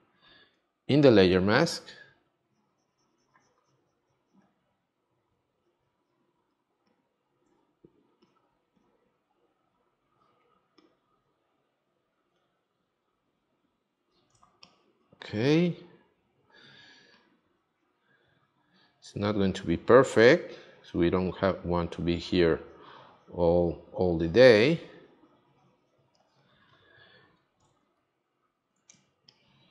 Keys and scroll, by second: 14.4 space, 28.9 space.